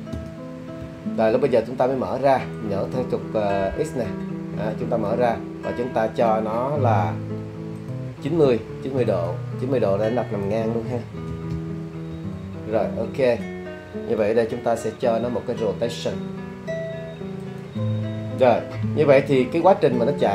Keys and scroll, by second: 0.1 Return, 11.3 9, 11.5 0, 12.1 Return, 15.2 i.